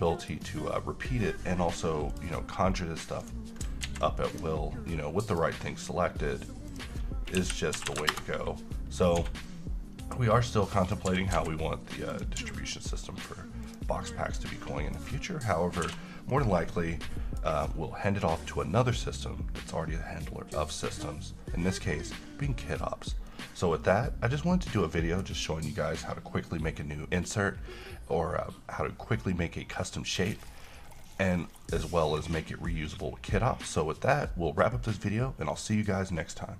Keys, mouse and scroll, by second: 2.2 click, 3.3 right click, 3.9 ctrl+z, 4.5 click, 7.9 r, 9.1 scroll up 1, 9.3 s, 10.9 click, 11.2 g, 11.4 z, 12.3 click, 12.5 g, 13.8 click, 14.3 scroll down 1, 14.5-15.2 middle click, 15.0 scroll up 1, 15.1-15.7 scroll down 1, 15.7 middle click, 16.0 1, 16.4-17.8 middle click, 17.6 scroll up 1, 23.5-25.6 middle drag.